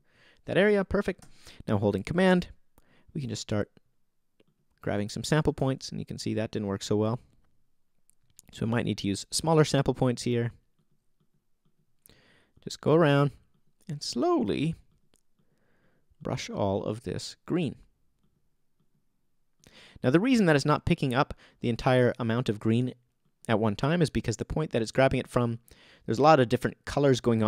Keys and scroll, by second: 5.6 super+z.